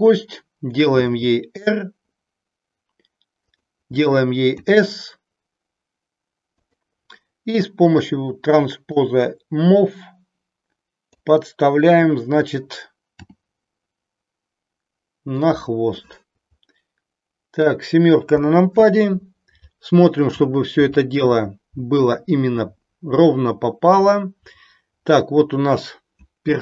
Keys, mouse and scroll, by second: 1.0 r, 4.5 s, 6.6 click, 7.9 click, 8.9-11.2 drag, 13.2 g, 16.0-17.7 middle drag, 18.3 KP_7.